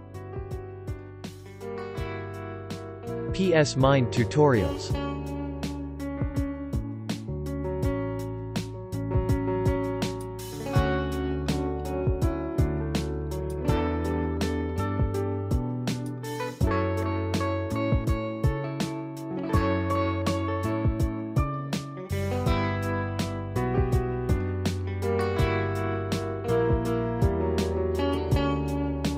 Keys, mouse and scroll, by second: 4.1 space, 4.2 click, 4.6 space, 4.8 click, 5.0 space, 5.2 click, 5.5 space, 6.6 click, 6.8 space, 6.9 click, 7.3 space, 10.0 click, 16.5 click, 21.1 click, 25.3 click.